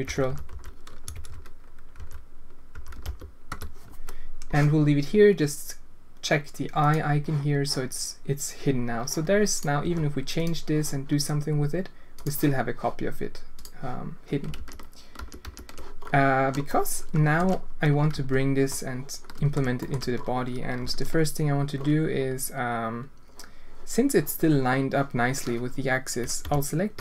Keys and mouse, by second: 1.2 BackSpace, 6.8 click, 9.8 g, 12.2 click, 13.5 click, 14.5 ctrl+z, 15.7 ctrl+z, 16.6-17.4 drag, 18.1 Tab, 18.7 click, 18.8 click, 19.8 shift+click, 20.8 alt+a, 25.2-26.4 drag, 26.4 l, 26.9 l.